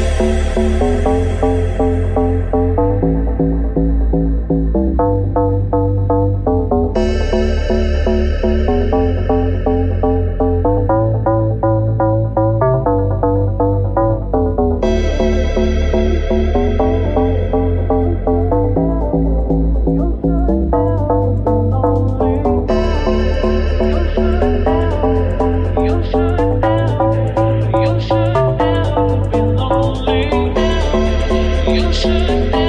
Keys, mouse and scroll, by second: 3.0 right click, 3.0 middle click, 3.7 shift+right click, 3.8-24.5 middle drag, 8.2 r, 11.2 alt+right click, 13.1 g, 14.9 r, 16.0 g, 18.1 Tab, 18.6 right click, 23.0 click, 23.4 Tab, 24.5 click, 24.5-27.7 alt+middle drag, 24.8 alt+z, 27.7 alt+right click, 27.7-30.8 alt+middle drag, 28.4 alt+z, 28.8 x, 30.8 alt+click, 30.9-32.1 alt+middle drag, 31.5 alt+z, 32.1 alt+click, 32.1 alt+middle click, 32.6 alt+shift+right click.